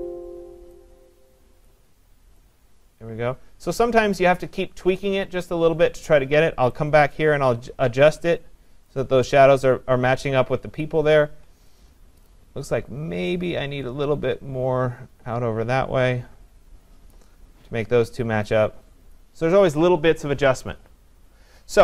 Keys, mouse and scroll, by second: 0.0 click, 4.3 click, 8.8 click, 12.0 click, 12.1 click, 12.2 click, 13.1 click, 17.1 click, 19.1 click.